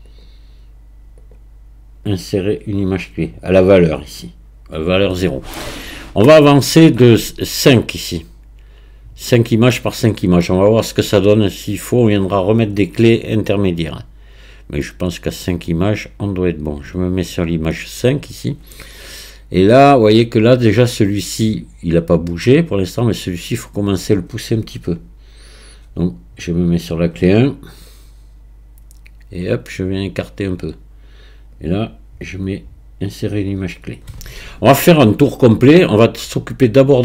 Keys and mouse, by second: 2.0-4.8 right drag, 11.7-17.7 drag, 27.9-30.5 drag, 31.5-34.4 middle drag.